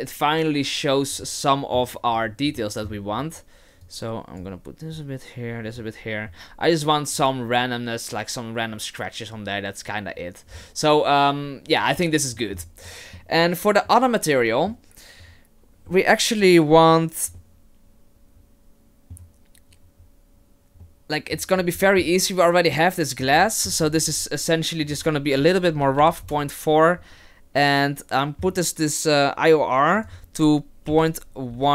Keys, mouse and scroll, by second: 1.2 middle click, 2.5 scroll up 2, 2.6 middle click, 3.1-3.8 scroll up 1, 3.8 click, 4.9 click, 11.1 scroll down 4, 13.2 middle click, 13.9 middle click, 20.9 middle click, 21.6-22.0 scroll down 3, 21.8 middle click, 22.0-22.5 scroll up 1, 22.5 click, 23.4 middle click, 23.9-24.7 scroll up 5, 24.9 click, 30.0 click.